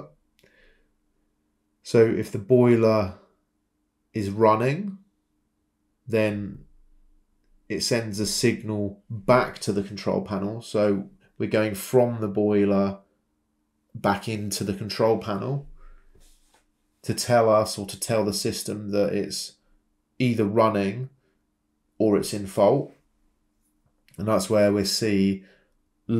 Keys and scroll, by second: 1.1 Escape, 2.5-4.0 typing, 7.1 Escape, 9.5-9.8 typing, 13.6 Return, 16.8 Escape, 19.7-21.8 typing, 22.8 Escape.